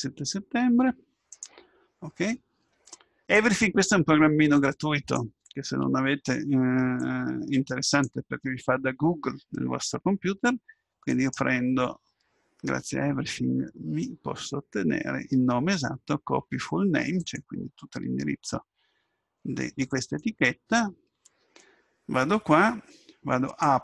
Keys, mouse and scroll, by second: 23.7 click.